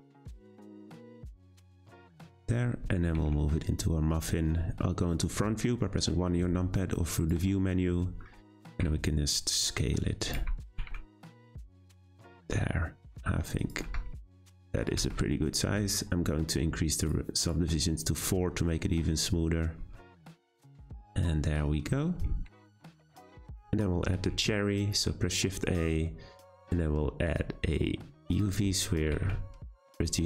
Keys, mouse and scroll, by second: 1.0 Tab, 1.2 scroll down 1, 1.3-1.9 middle drag, 1.9-3.1 scroll down 3, 3.1 g, 4.3 `, 8.0 scroll up 3, 8.3 Tab, 8.6 a, 8.7 s, 10.3 Tab, 10.7 g, 13.8 Tab, 14.1 a, 14.2 s, 15.0 Tab, 17.0-18.7 drag, 18.7-21.7 middle drag, 22.2-22.6 scroll down 2, 22.6-24.3 shift+middle drag, 24.3 shift+a, 28.8-29.1 scroll down 1, 29.1 g.